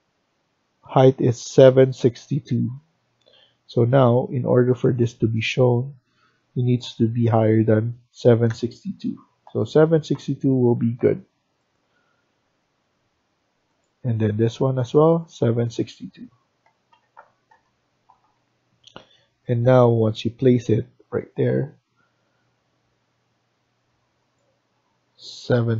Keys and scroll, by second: 1.9 Escape, 2.2 Escape, 7.2 typing, 8.3-10.0 typing, 12.7 Escape, 15.0 typing, 16.3-17.7 typing, 18.1 Escape, 18.5 Escape, 25.2-25.7 typing.